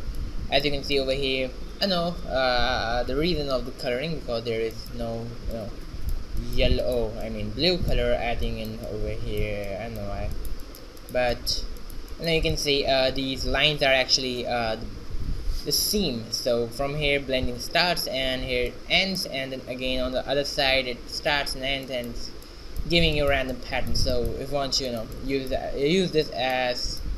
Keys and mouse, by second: 2.9-7.3 middle drag.